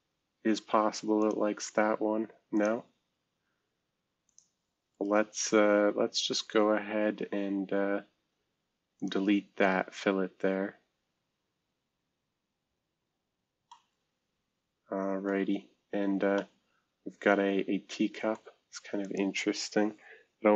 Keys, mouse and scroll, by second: 4.9 right click, 9.1 click, 11.4 scroll down 2, 12.3-13.0 scroll down 8, 13.4 scroll up 2, 13.7-15.9 middle drag, 15.9-16.6 scroll up 2, 16.3-18.3 middle drag, 19.0 click.